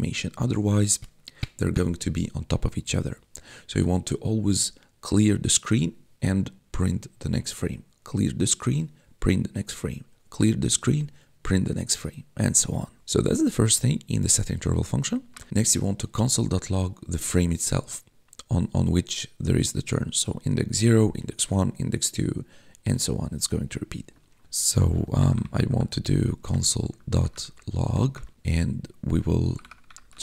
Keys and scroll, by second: 15.2 Return, 24.9-30.2 typing, 26.4 Tab.